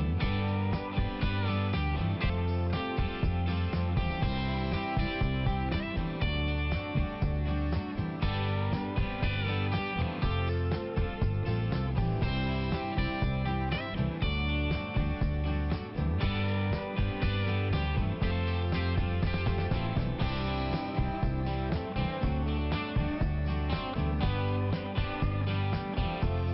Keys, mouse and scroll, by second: 0.0 double click, 0.3 double click, 0.8 click, 1.1 click, 1.2 double click, 1.5 double click, 1.6 double click, 1.8 double click, 2.0 double click, 2.5 double click, 3.8 [, 4.1 click, 4.3 click, 4.5 click, 4.6 double click, 4.8 double click, 5.0 double click, 5.1 double click, 5.3 double click, 5.5 double click, 5.6 double click, 5.8 double click, 5.9 double click, 6.1 double click, 6.2 double click, 6.3 double click, 6.5 double click, 6.7 double click, 7.3 click, 7.4 click, 7.6 click, 7.8 double click, 7.9 double click, 8.3 click, 8.4 click, 8.8 click, 10.3 click, 10.8 click, 11.0 click, 13.7 click, 15.4 click, 17.7 click, 18.4 click, 18.6 click, 18.9 click, 19.0 double click, 19.3 double click, 19.8 click, 21.5 click, 22.1 click, 22.7 click, 23.5 click, 24.6 click, 26.0 click.